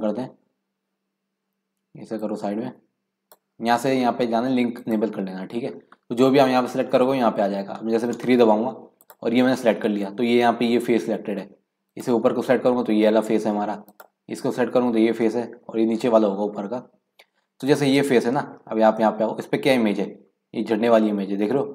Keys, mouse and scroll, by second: 8.4 3, 9.0 click, 11.9-14.0 drag, 17.6 click, 18.5-19.1 scroll up 2, 19.2-20.8 middle drag, 20.8-21.4 scroll up 1, 21.6-21.7 scroll down 2.